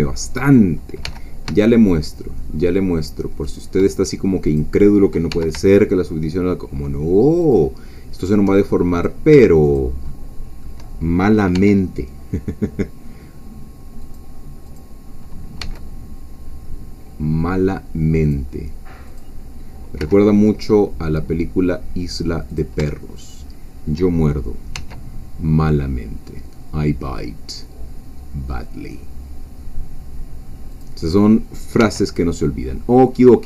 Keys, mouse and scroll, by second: 0.4 click, 1.0 g, 3.5 shift+click, 4.6 click, 5.3 g, 7.4 shift+click, 7.9 shift+middle click, 8.9 click, 9.7 shift+click, 10.1-11.3 shift+middle drag, 11.3-12.2 scroll up 1, 11.5 e, 12.2-13.9 scroll up 1, 14.0 click, 15.6 g, 18.2-19.3 drag, 20.0 g, 22.5 click, 23.3 shift+click, 24.7 e, 30.7 click, 31.8 e.